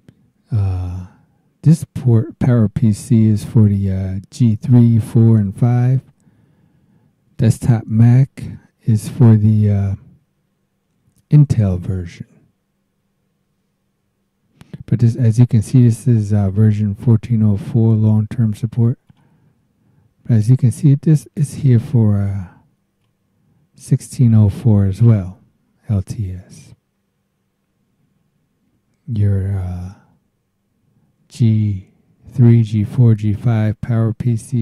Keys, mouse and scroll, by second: 17.8 click, 19.1 click, 19.7 scroll up 1, 19.8 scroll down 2, 20.0 scroll up 1, 23.0-24.8 drag.